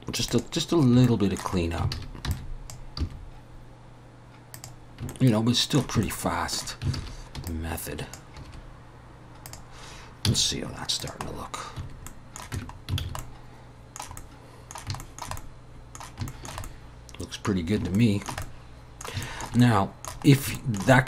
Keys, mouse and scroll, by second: 0.8 scroll down 1, 1.0 shift+middle click, 1.6 scroll up 2, 1.9 alt+a, 2.3 b, 3.0 g, 5.1 shift+middle click, 6.0 shift+middle click, 7.0 alt+a, 7.5 click, 8.5 g, 10.3 z, 11.3 scroll down 3, 12.1 middle click, 12.6 Tab, 12.7 scroll down 3, 13.0 alt+a, 13.2 middle click, 14.2 middle click, 15.0 shift+middle click, 15.4 middle click, 16.3 shift+middle click, 16.6 middle click, 17.6-18.0 scroll down 2, 18.0 shift+middle click, 18.4 middle click, 19.2 shift+middle click, 19.6 middle click, 20.3 scroll up 2, 20.6 shift+middle click, 20.9 middle click.